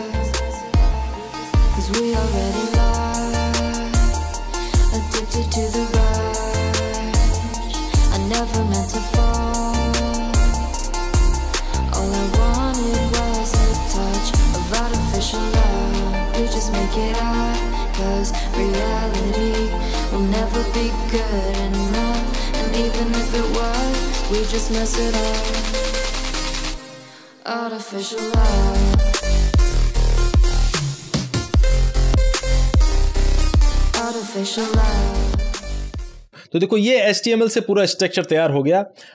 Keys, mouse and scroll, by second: 0.0-0.7 typing, 0.9 Return, 1.1 Down, 1.2 Right, 1.7 alt+shift+a, 1.8-3.6 typing, 4.6-7.1 typing, 5.0 Tab, 7.3 Return, 7.8 Down, 8.0 Right, 8.5 Right, 8.6-10.4 typing, 11.0-11.6 scroll down 1, 12.0 ctrl+scroll down 1, 12.2 scroll up 1, 12.3 scroll down 1, 12.6 click, 13.8 Tab, 14.0-21.6 typing, 16.8 shift+Tab, 17.2 Right, 17.7 Return, 22.0 Right, 22.9 Return, 23.0-24.5 typing, 25.4 Down, 25.5 Right, 26.2 alt+shift+a, 26.2-35.7 typing, 28.1 Tab, 33.2 Return.